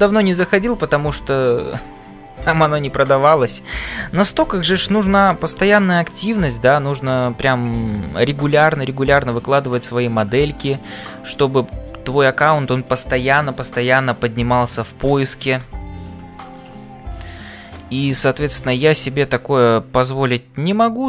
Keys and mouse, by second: 0.0-21.0 typing, 5.6 shift+middle click, 7.0 click, 9.6 click, 11.3 click, 16.3 shift+middle click, 17.3 click.